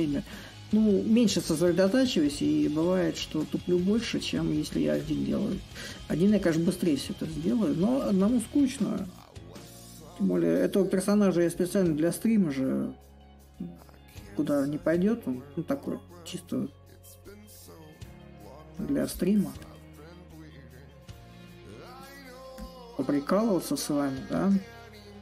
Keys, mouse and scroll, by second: 0.4 click, 7.0 click, 7.5-8.7 drag, 8.7 s, 10.8-15.9 drag, 16.2-20.3 drag, 20.3 a, 22.2 right click, 24.2-25.2 drag.